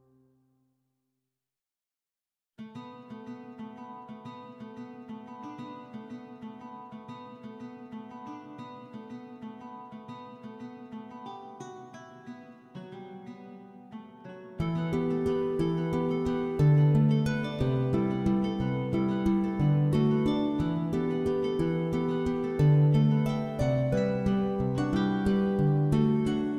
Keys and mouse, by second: 0.5 middle click, 3.8 middle click, 4.0 alt+middle click, 4.2 alt+middle click, 4.5 alt+shift+z, 4.5 shift+middle click, 4.9 click, 5.1 1, 5.4 g, 5.9 click, 6.0 click, 6.4 alt+z, 6.4 middle click, 6.8 middle click, 7.0 3, 7.4 shift+click, 7.6 middle click, 7.8 middle click, 8.1 e, 8.6 click, 8.7 middle click, 9.3 alt+middle click, 9.4 alt+middle click, 9.6 alt+z, 9.8 g, 10.4 click, 10.5 middle click, 11.0 middle click, 11.1-13.4 typing, 11.3 click, 11.4 alt+middle click, 11.5 alt+z, 12.2 click, 12.8 click, 13.0 shift+click, 14.5 click, 15.3 m, 15.6 middle click, 15.8 alt+middle click, 16.0 alt+middle click, 16.3 click, 16.5 g, 16.7 click, 16.9 shift+click, 17.1 g, 17.6 shift+click, 17.9 middle click, 18.5 middle click, 19.1 middle click, 19.5 click, 19.7 click, 19.8 middle click, 20.6 middle click, 21.8 ctrl+click, 22.2 middle click, 22.5 ctrl+click, 22.8 middle click, 23.2 click, 24.0 middle click, 24.5 g, 24.5 g, 25.2 click, 25.4 middle click, 25.7 middle click, 25.9 middle click, 26.3 shift+middle click.